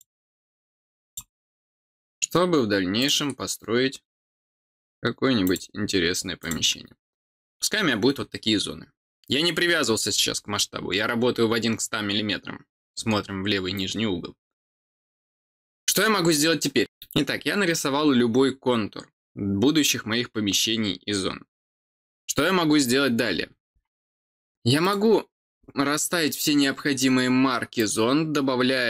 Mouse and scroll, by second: 1.0 click, 2.9 click, 5.4 click, 6.4 click, 24.8 click, 27.7 click.